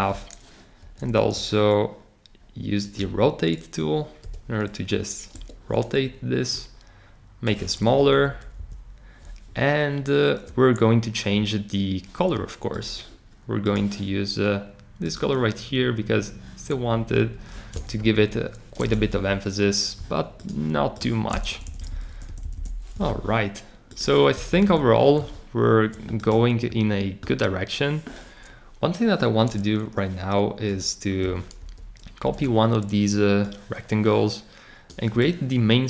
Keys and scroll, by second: 0.8 shift+super+r, 4.2 v, 5.3 Escape, 8.1 Up, 8.5 Right, 17.9 Up, 18.7 Escape, 19.1 Up, 21.5 Left, 21.8 Left, 22.1 Left, 22.4 Left, 24.5 Left, 31.6 super+c, 32.2 super+v.